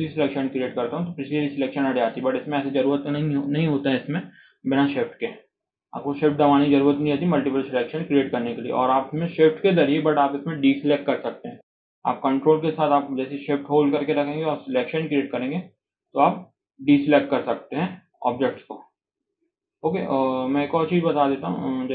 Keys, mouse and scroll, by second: 1.1 scroll down 2, 1.4-4.4 shift+middle drag, 4.5-5.1 scroll up 3, 4.8 shift+middle click, 5.1 scroll down 1, 5.4-8.7 shift+middle drag, 14.1 ctrl+shift+right click, 17.3 scroll up 1, 17.6-18.0 shift+middle drag, 18.0-19.1 shift+drag, 19.1-19.5 scroll up 1, 19.5 click, 19.8-20.6 scroll down 1, 21.0-21.4 ctrl+drag, 21.4 ctrl+right click.